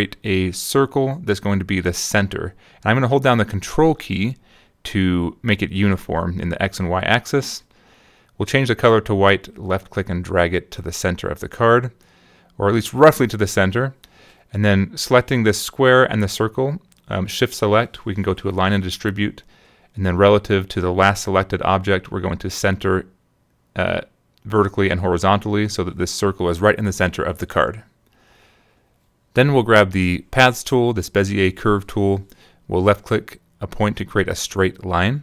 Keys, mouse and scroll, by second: 2.1-5.0 ctrl+drag, 6.6 click, 8.6 click, 9.3-12.8 drag, 14.2 shift+click, 16.4 click, 22.6 click, 23.7 click, 24.8 click, 25.7 middle click, 26.2 click, 27.4 -, 29.6 click, 31.3 click, 34.1 ctrl+click, 35.1 Return.